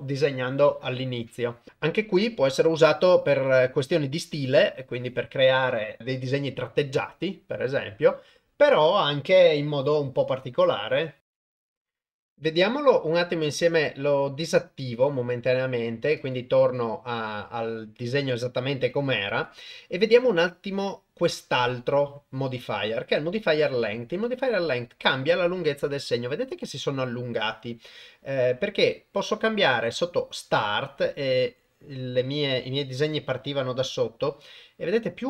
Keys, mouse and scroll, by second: 14.9 click, 16.2-16.5 drag, 19.3-24.4 drag, 30.2-35.2 drag.